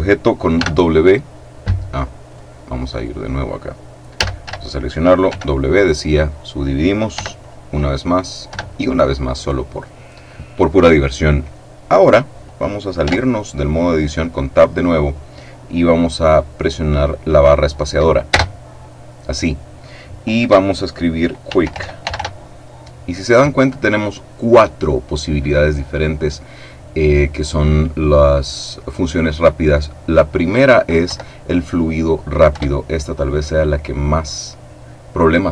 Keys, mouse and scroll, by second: 0.6 w, 2.3 right click, 2.9 right click, 4.2 a, 5.3 w, 6.1 click, 7.1 w, 7.4 click, 8.5 w, 8.7 click, 13.1 Tab, 18.2 space, 21.4-22.1 typing, 31.1 Down, 32.5 Return.